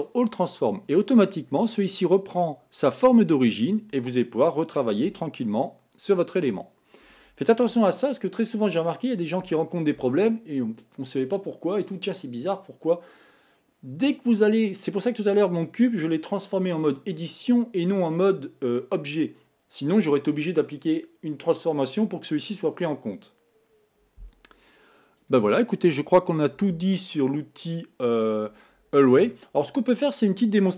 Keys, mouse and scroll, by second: 1.2-4.4 scroll down 3, 5.3 r, 25.4 click.